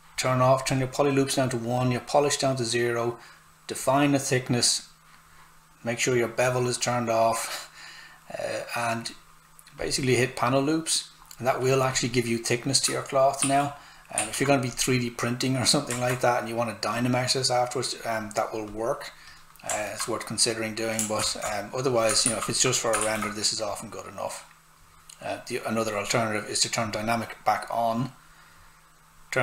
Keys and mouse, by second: 9.8 click, 13.4 shift+f, 14.7 click, 16.1 right click, 16.9 click, 19.8 alt+right click, 21.2 ctrl+z, 21.9 click, 22.2 shift+f, 23.7 click.